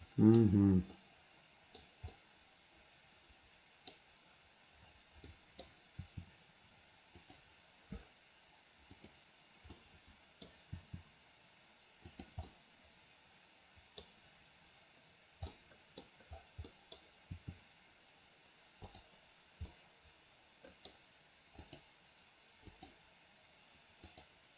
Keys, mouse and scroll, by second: 1.1-1.9 middle drag, 2.2-4.0 middle drag, 5.3-5.7 middle drag, 6.1 r, 9.0 click, 9.8-10.5 middle drag, 10.8 r, 12.5-14.1 middle drag, 15.6 middle click, 16.7 middle click, 17.4 r, 19.8-20.9 middle drag, 21.8 click, 22.8 click, 24.1 click.